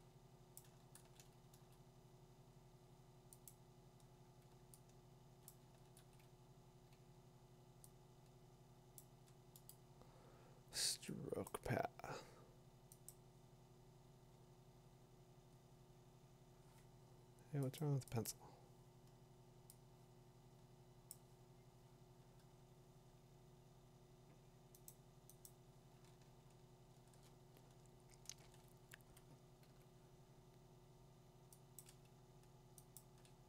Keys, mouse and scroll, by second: 0.6 click, 1.5 ctrl+z, 5.4 click, 5.5 click, 6.0 ctrl+z, 9.0 ctrl+click, 9.7 click, 11.5 click, 13.3 click, 17.8 click, 18.3 click, 21.1 click, 22.2 click, 24.9 click, 25.5 click, 25.9 middle click, 26.1 middle click, 26.2 middle click, 26.3 middle click, 26.4 scroll up 5, 26.9-27.7 scroll down 10, 28.5 scroll down 2, 29.6 middle click, 31.8 click, 32.6 b, 33.0 click.